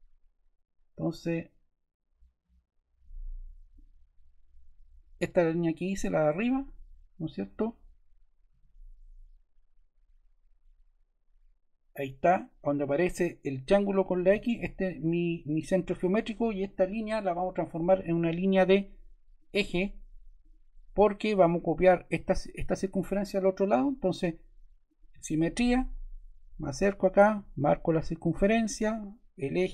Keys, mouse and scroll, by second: 8.4-9.6 middle drag, 8.4-9.5 scroll, 14.0-15.1 drag, 15.3-17.6 drag.